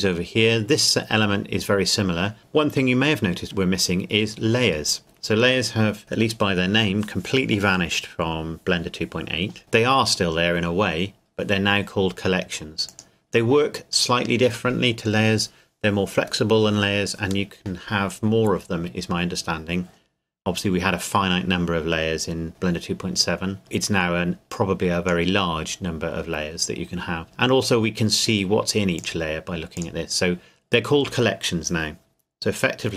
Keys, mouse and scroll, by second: 12.9 click, 24.5 click, 29.0 click.